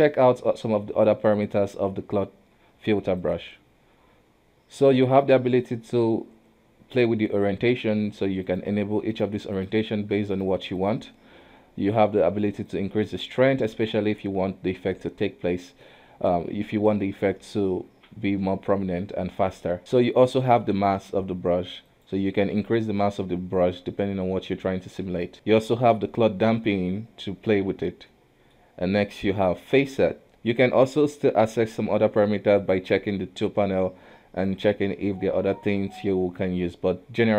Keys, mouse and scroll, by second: 8.4 click, 9.1 click, 9.5 click, 10.3 shift+click, 10.8 shift+click, 12.7-15.8 drag, 21.9 click, 22.9-25.3 drag, 25.3-27.8 middle drag, 28.1-31.2 middle drag, 32.6-37.3 drag.